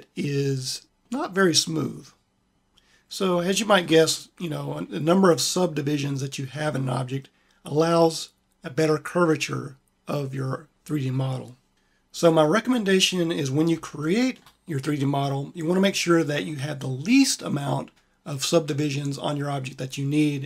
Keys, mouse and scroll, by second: 2.7 middle click.